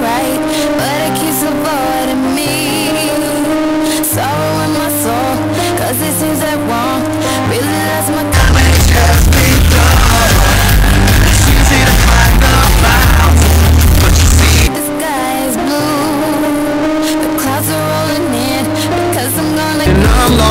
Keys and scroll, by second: 15.1 Page_Down.